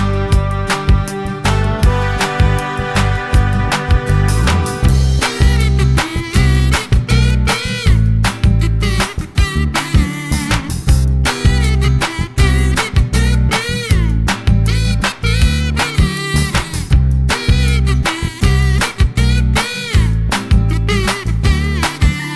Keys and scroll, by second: 18.9 super+d.